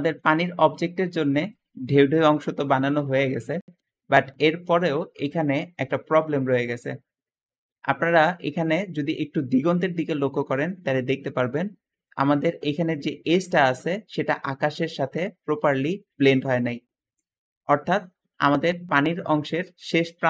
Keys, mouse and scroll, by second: 4.3 Escape, 4.4 Escape, 7.6 `, 18.2 Escape.